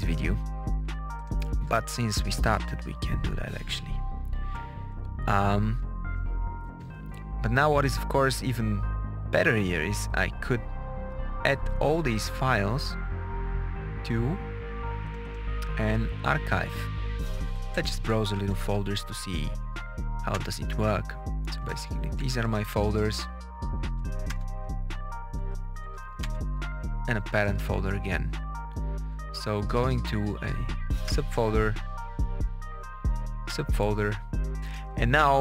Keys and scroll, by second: 2.1 Page_Up, 2.8 Return, 4.4 Page_Up, 4.9 Down, 5.4 Down, 17.3 Up, 20.3 Return, 21.7 Up, 23.7 Up, 24.2 Return, 25.3 Up, 26.2 Return, 27.4 Up, 29.1 Down, 31.0 Return, 31.6 Down, 33.4 Return, 34.7 Return.